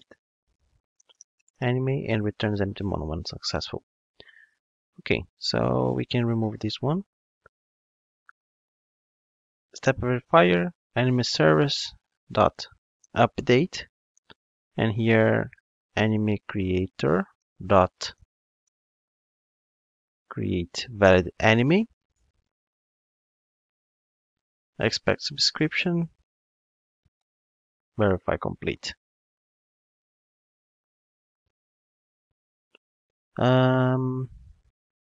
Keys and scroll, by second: 6.5 super+x, 13.4 Return, 14.5 alt+shift+Right, 17.1 alt+shift+Right, 17.2 Return, 27.1 super+x.